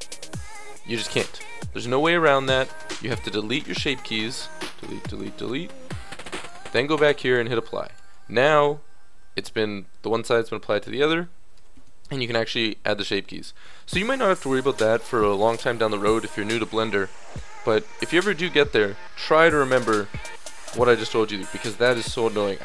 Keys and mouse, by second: 8.0 Tab, 9.2 a, 11.5 Tab, 18.0 KP_1.